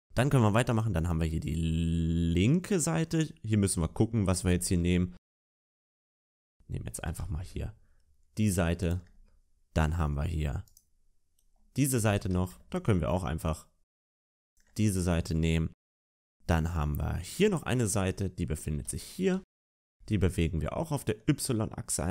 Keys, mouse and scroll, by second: 0.6 shift+middle click, 0.6 right click, 0.6-1.6 scroll down 6, 6.9 shift+middle click, 6.9-8.5 scroll up 2, 6.9 g, 9.8 middle click, 9.8-10.1 scroll down 3, 10.5 right click, 12.0-12.4 scroll up 4, 12.0 g, 16.1 shift+middle click, 16.1-17.1 scroll down 4, 17.1 right click, 18.7-19.9 scroll up 2, 18.7 g.